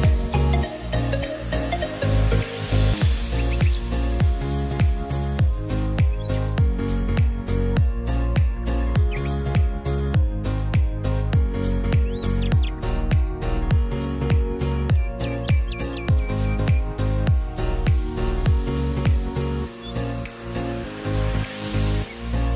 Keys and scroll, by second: 14.2 ctrl+r, 21.9 5.